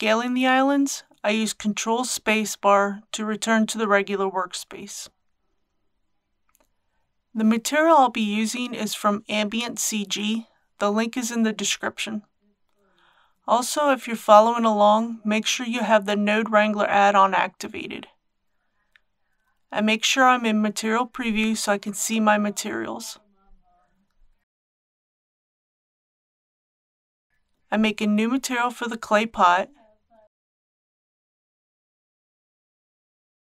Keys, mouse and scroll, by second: 1.0-2.6 scroll down 1, 2.6-4.3 middle drag, 5.3-6.4 scroll up 1, 18.9 Tab, 19.8 z, 21.6 click, 23.7-24.2 scroll down 1, 28.2-30.2 drag, 29.9-32.8 typing.